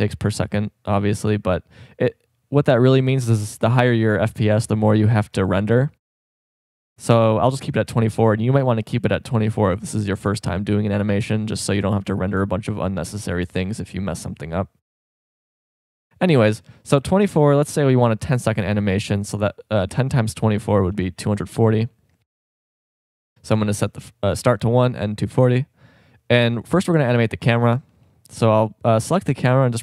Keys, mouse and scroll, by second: 4.7-7.4 drag, 11.6-15.0 drag, 18.9-22.6 drag, 26.6-29.2 drag.